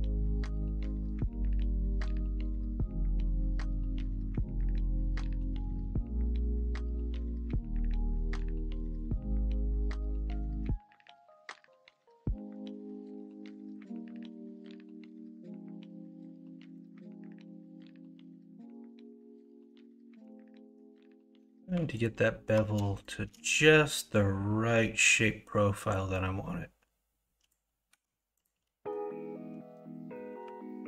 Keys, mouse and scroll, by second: 3.1 1, 3.6 click, 4.7 ctrl+b, 20.3 ctrl+z, 21.3 2, 24.4-27.9 drag, 27.9 1.